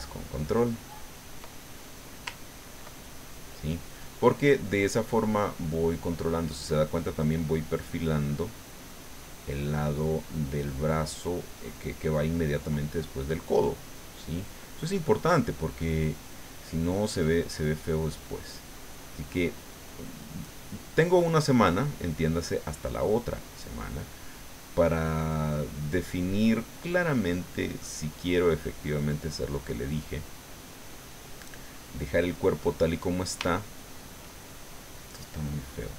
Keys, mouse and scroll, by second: 1.9 middle click, 2.5 ctrl+click, 3.3 middle click, 4.8 middle click, 5.7 middle click, 6.5 middle click, 8.1-10.3 drag, 11.4 middle click, 14.0 middle click, 15.1-18.4 drag, 18.5-19.9 drag, 20.4 click, 21.7-23.2 drag, 23.2 middle click, 24.1-27.3 drag, 27.4 middle click, 28.2-29.4 drag, 29.7-30.8 middle drag, 30.9 middle click, 31.7-33.4 middle drag, 33.5 shift+middle click.